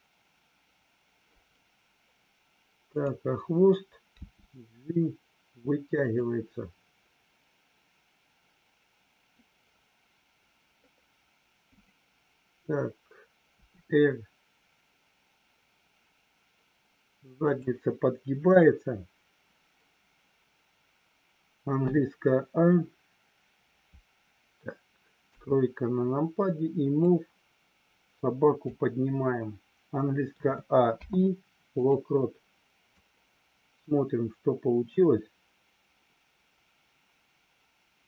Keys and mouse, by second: 2.9 click, 6.0 click, 11.7 click, 13.5 r, 17.4 click, 25.1 KP_3, 27.0-28.6 drag, 30.9 i, 32.9-38.0 drag.